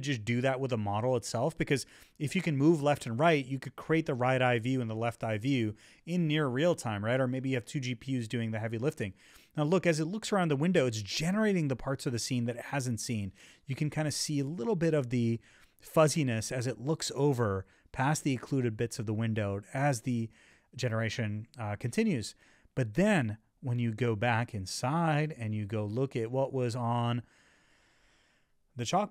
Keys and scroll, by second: 4.3 Left, 5.3 Left, 7.3 Left, 7.7 Up, 8.3 Left, 10.0 Left, 11.8 Left, 13.2 Left, 15.3 Up, 15.4 Left, 17.2 Left, 19.0 Left, 20.4 Left, 23.6 Right, 24.2 Right, 24.8 Right, 25.0 Up.